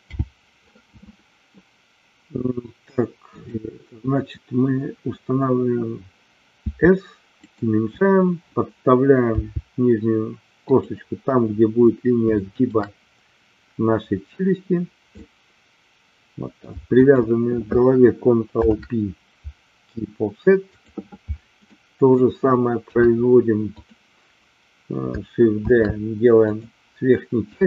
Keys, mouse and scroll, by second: 3.4 click, 6.7 s, 7.3 click, 12.4 shift+middle click, 15.2-16.7 middle drag, 17.1 shift+click, 18.5 ctrl+p, 21.7 middle click, 22.8 KP_3, 23.6 click, 25.6 shift+d, 26.3 click.